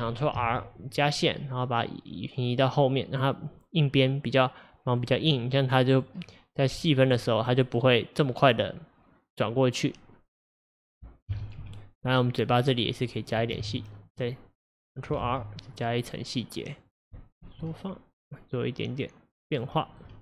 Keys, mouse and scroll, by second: 0.4 ctrl+r, 5.4-6.9 middle drag, 6.9 click, 7.3-10.3 middle drag, 11.4 KP_1, 11.7 KP_3, 13.6 ctrl+e, 15.3 ctrl+r, 17.5 s, 20.1 middle click.